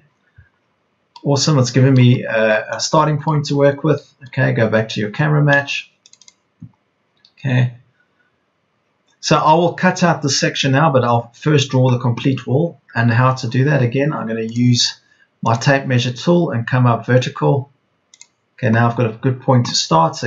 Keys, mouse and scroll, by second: 4.5 Escape, 6.2 Escape.